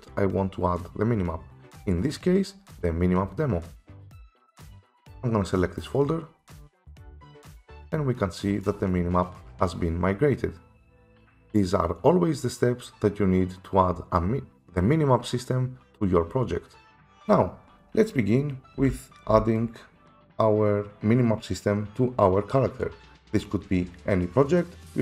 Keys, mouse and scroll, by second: 7.1 click, 8.6 click, 18.8-19.2 typing, 19.6 click.